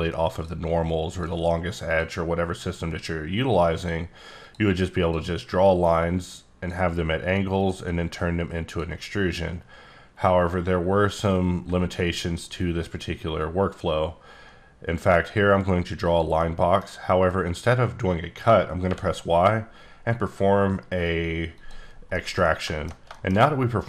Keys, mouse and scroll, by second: 1.1 click, 2.8 click, 4.4 click, 5.8 click, 7.6 click, 10.2-11.2 scroll down 1, 11.2 middle click, 14.0-15.3 drag, 16.1 click, 16.4 middle click, 18.8 y, 21.5 click, 21.9 scroll down 1, 22.0 scroll, 22.1 middle click, 22.3 scroll down 1, 22.4 middle click, 23.3 shift+scroll up 1.